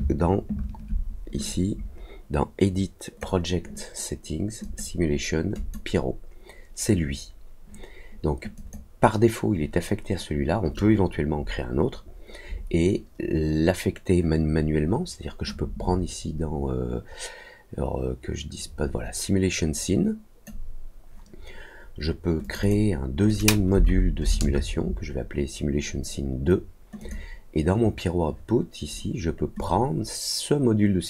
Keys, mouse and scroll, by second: 1.4-3.1 drag, 4.6 click, 5.5 click, 8.5 click, 15.4-20.4 drag, 22.4 click, 22.6 click, 23.2 click, 26.9 click, 29.5-31.0 drag.